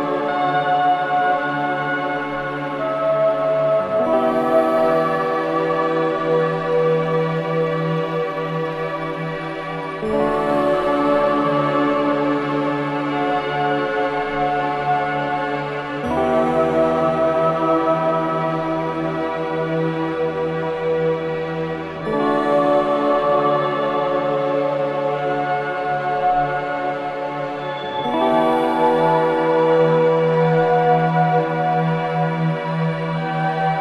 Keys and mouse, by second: 0.0 ctrl+click, 1.7 ctrl+p, 3.0 Down, 3.4 Return, 4.8-6.2 drag, 6.2 BackSpace, 6.4 Return, 9.7-12.1 drag, 13.2 g, 16.3 click, 17.4 s, 19.1 click, 19.8 g, 25.1-28.2 drag, 28.4 0, 30.8 g, 33.6 click.